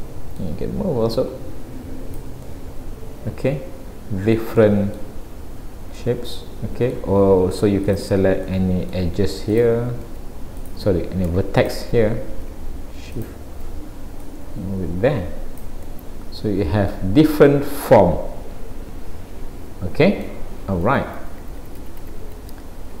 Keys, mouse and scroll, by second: 0.0 middle click, 1.1 click, 2.4 middle click, 4.6 middle click, 7.9 click, 8.5 middle click, 9.5 click, 10.6 click, 11.6 shift+click, 11.9 shift+click, 13.1 click, 14.3 click, 15.9 middle click, 17.3 middle click, 20.9 ctrl+z, 22.5-23.0 scroll down 2.